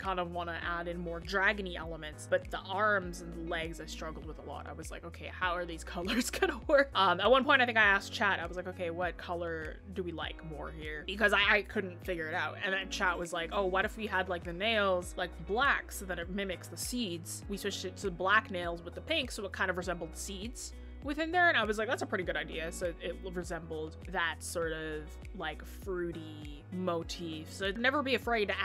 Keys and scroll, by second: 18.0 scroll down 1, 18.1 scroll up 1, 18.7 scroll up 1.